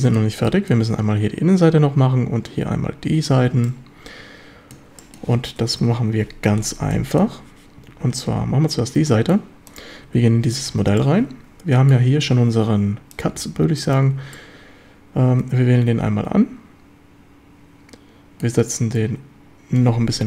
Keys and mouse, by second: 0.0 shift+drag, 0.5 drag, 3.7-4.8 shift+drag, 5.0 click, 5.8 KP_7, 7.0 shift+middle drag, 9.1 shift+middle drag, 10.1 Tab, 10.7 ctrl+s, 11.0-12.0 drag, 14.4-18.5 drag, 19.8-20.2 drag.